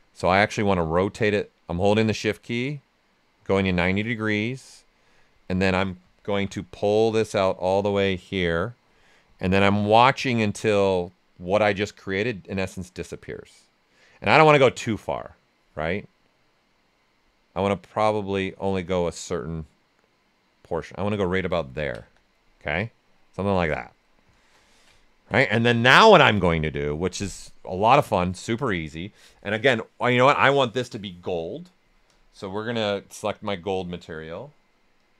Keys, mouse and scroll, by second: 0.8-4.1 drag, 4.1 right click, 5.4 alt+right click, 6.3 shift+f, 6.9-9.0 drag, 9.0 right click, 9.3 ctrl+right click, 9.8 right click, 10.7-20.7 drag, 21.5 ctrl+right click, 22.0 q, 22.3 right click, 24.6 alt+right click, 25.6 ctrl+alt+right click, 27.4-30.8 drag, 32.0 click.